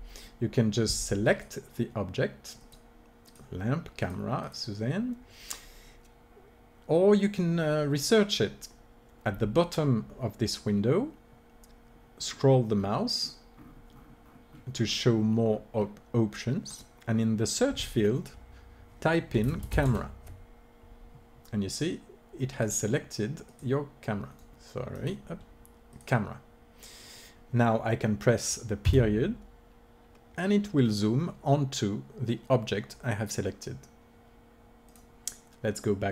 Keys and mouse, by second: 1.4-27.7 drag, 25.9 right click, 28.7 KP_Decimal.